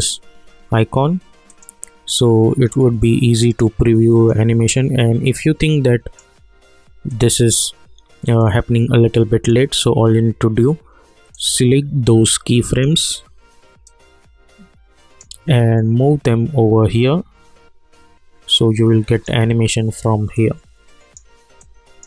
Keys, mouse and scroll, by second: 4.1-22.0 drag.